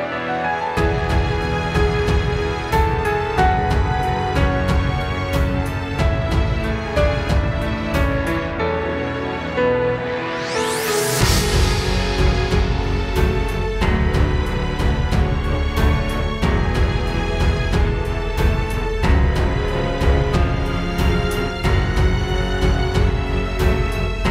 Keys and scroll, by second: 4.7 space, 5.3 super+space, 15.5 space, 16.7 space, 19.1 space, 20.3 space, 22.4 space, 23.2 super+space.